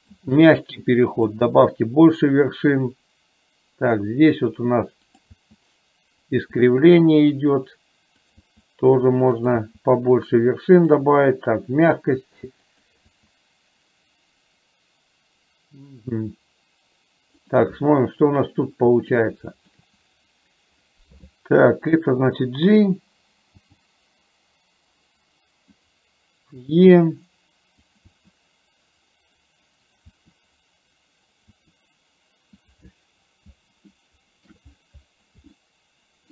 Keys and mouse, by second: 0.2 e, 6.6 e, 11.1 e, 19.2 shift+middle click, 23.7 g, 28.2 e, 34.0 middle click, 35.7 shift+middle click.